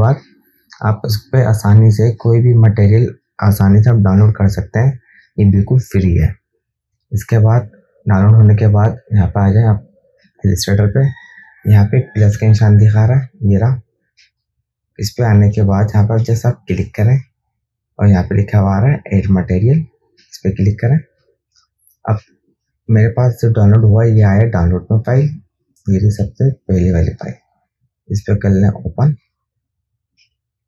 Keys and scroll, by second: 14.5 KP_2, 16.1 KP_1.